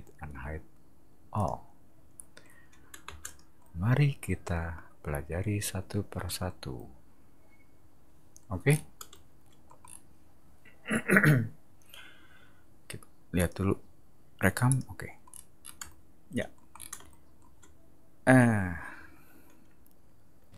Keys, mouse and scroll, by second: 1.3 click, 3.0 space, 3.2 click, 8.7 scroll down 2, 9.7 middle click, 9.8 scroll down 2, 13.3 click, 14.7 click, 15.3-15.7 scroll down 4, 16.7 scroll up 2, 20.5 ctrl+[.